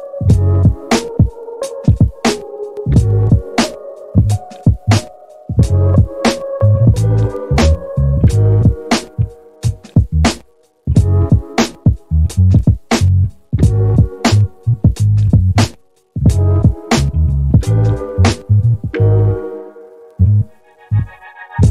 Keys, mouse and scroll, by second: 4.6-6.2 middle drag, 7.4-9.4 drag, 11.0 click, 18.8 click.